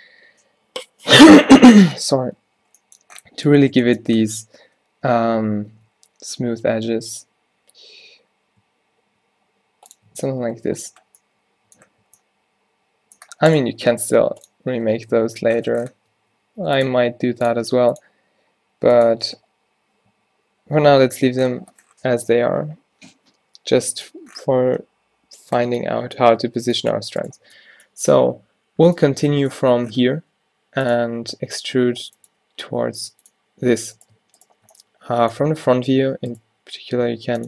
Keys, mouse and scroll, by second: 3.6 Tab, 4.5 ctrl+z, 5.8 ctrl+z, 6.8 ctrl+b, 10.1 Tab, 12.1 a, 14.9 Tab, 15.6 Tab, 16.0 Tab, 16.5 ctrl+r, 17.7 ctrl+r, 19.2 Tab, 20.9 ctrl+z, 24.8 Tab, 25.6 Tab, 27.5 Tab, 30.2 e, 32.2 e, 32.3 e, 34.0 click, 35.1 click, 35.6 click, 36.4 click, 36.4 z, 36.5 g.